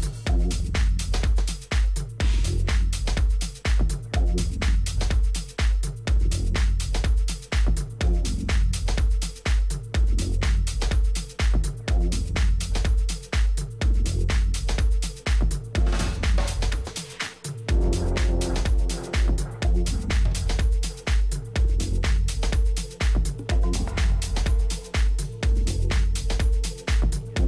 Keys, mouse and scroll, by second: 6.2-9.4 middle drag, 9.5-12.6 middle drag, 12.6 t, 13.8-15.8 drag, 18.2-21.4 drag, 20.0-27.4 middle drag, 23.0 t.